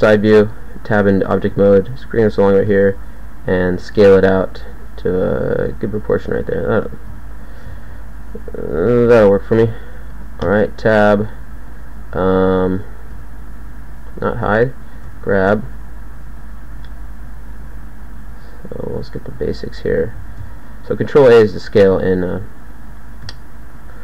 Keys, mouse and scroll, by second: 0.3 Tab, 1.5 g, 2.7 s, 3.6 g, 4.2 s, 5.5 g, 8.3 s, 10.5 Tab, 13.1 h, 15.1 z, 15.1 g, 16.7 g, 18.6-20.7 drag, 18.9 g, 20.3 ctrl+a, 21.8 ctrl+a, 23.3 g.